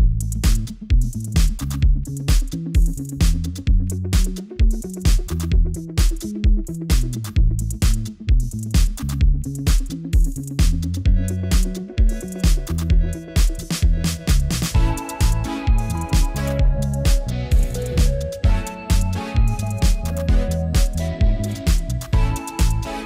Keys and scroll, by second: 3.1 super+v.